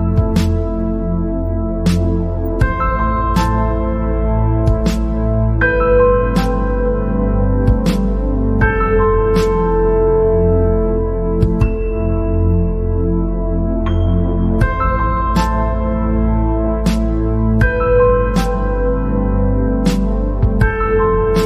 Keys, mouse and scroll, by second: 4.7 click, 4.9 scroll down 6, 5.3-5.7 scroll up 8, 6.0 scroll down 1, 9.1 scroll down 2, 9.6-10.2 scroll up 2, 10.6-11.7 middle drag, 11.7-12.3 scroll up 7, 12.5 scroll down 3, 12.7-14.3 middle drag, 14.3 click, 15.1 scroll down 4, 15.5-16.2 scroll up 7, 16.3 scroll down 1, 16.4-19.6 middle drag, 20.5-20.8 scroll down 5, 20.8 scroll up 4.